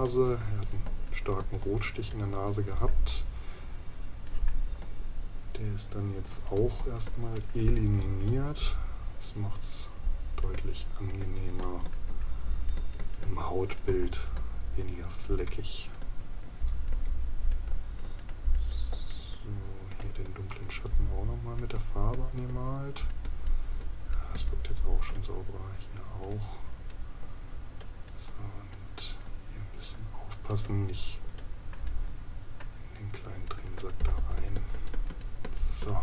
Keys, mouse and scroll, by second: 19.1 right click.